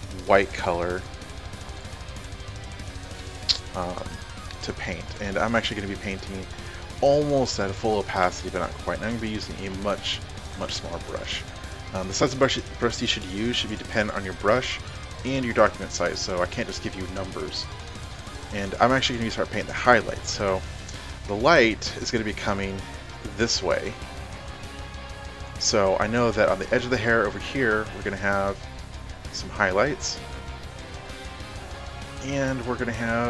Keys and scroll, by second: 9.5 [, 10.1 [, 10.6 [, 24.7 ctrl+alt+z.